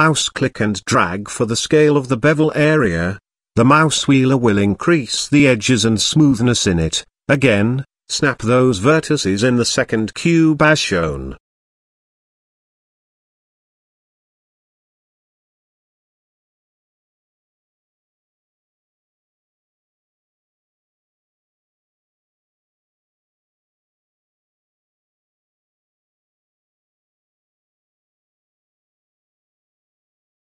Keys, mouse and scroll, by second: 0.2 Tab, 0.8 middle drag, 1.2-3.7 shift+middle drag, 4.2 click, 4.6 Tab, 5.1-5.6 middle drag, 5.8 shift+middle drag, 7.2 click, 8.1 z, 8.6 click, 9.7 g, 10.8 g, 12.1 Tab, 12.5 z, 13.2-13.9 middle drag, 14.2-14.6 shift+middle drag, 15.3-15.9 middle drag, 16.2 shift+middle click, 17.0-17.6 middle drag, 17.9 shift+middle drag, 18.7 Tab, 19.9 z, 20.7 click, 21.5 shift+click, 22.4 g, 23.8 z, 25.5 Tab, 25.8 middle drag, 26.2-26.6 shift+middle drag, 28.8 middle drag, 29.2-29.6 shift+middle drag, 30.2 click.